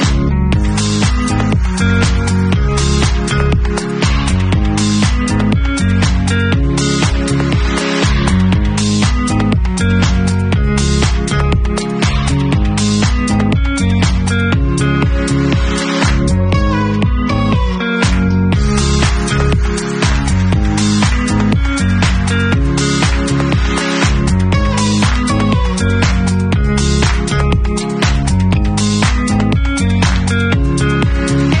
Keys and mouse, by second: 12.3-20.5 drag, 20.5-24.1 middle drag, 24.1-25.7 drag, 25.7 middle click, 25.9-27.9 drag, 27.9-31.6 middle drag.